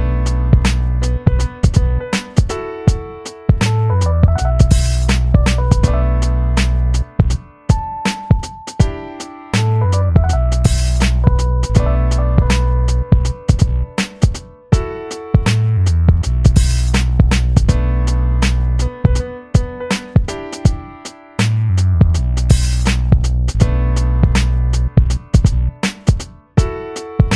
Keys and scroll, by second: 8.4 ctrl+=, 20.1-20.9 typing, 22.0 ctrl+shift+[, 25.7-27.3 typing.